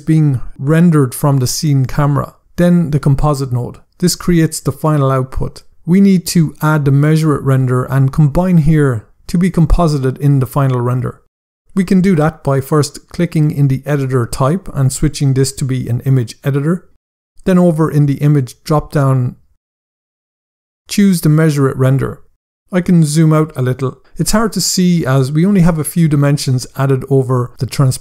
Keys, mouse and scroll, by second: 0.8 scroll up 1, 6.8 click, 12.9 click, 16.3 click, 18.9 click, 21.2 click, 22.3 scroll down 1, 24.0 scroll up 1.